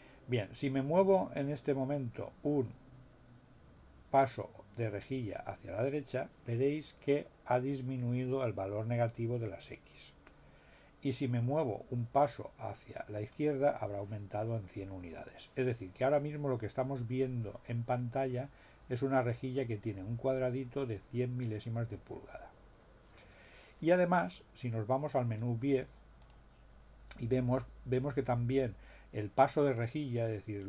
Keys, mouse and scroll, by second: 26.2 click.